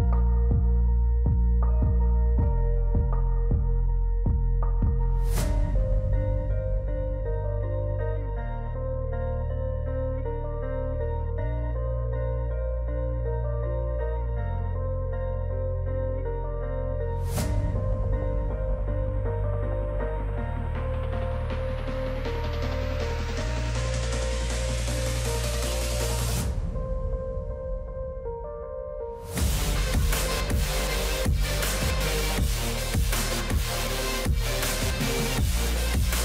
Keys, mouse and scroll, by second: 10.9 ctrl+z, 11.6 ctrl+z, 20.6 click, 23.2-26.4 drag, 28.4 click, 32.2-35.4 drag.